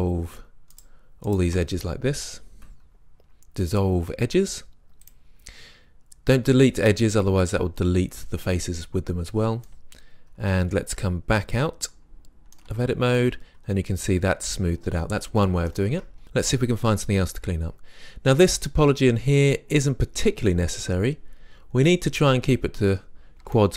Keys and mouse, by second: 2.2 Delete, 12.7 Tab, 15.9 Tab, 22.9-23.7 middle drag.